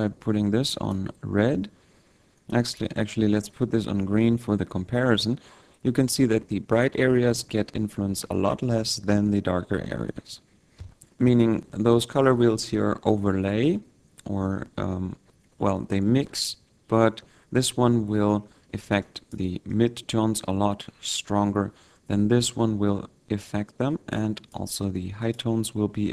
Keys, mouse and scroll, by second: 0.0 click, 2.9 click, 19.2 click, 20.1 click, 23.9 click, 25.6 click.